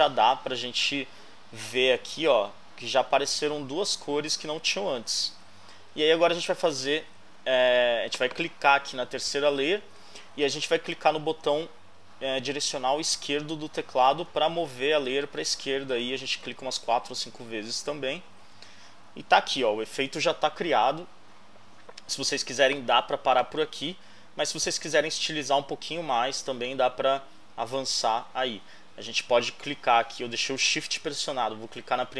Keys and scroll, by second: 14.3 Left.